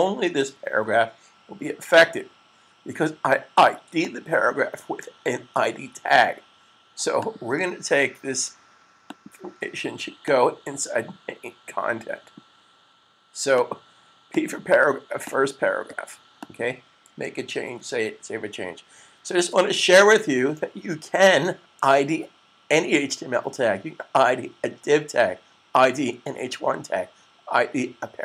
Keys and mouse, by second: 0.1 super+s, 3.8 click, 6.9 click, 10.1 click, 13.6 click, 17.5 super+s.